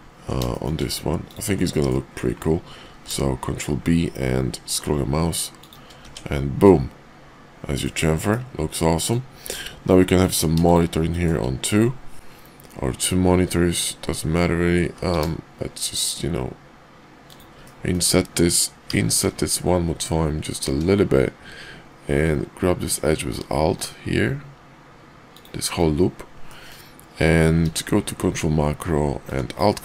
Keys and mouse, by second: 0.5 shift+middle click, 1.7 middle click, 2.8 ctrl+b, 6.0 Tab, 6.6-7.8 middle drag, 8.1 KP_5, 8.9 middle drag, 9.4 Tab, 11.1 shift+middle click, 17.6 middle click, 25.2 alt+click, 26.5 middle click, 27.6 q.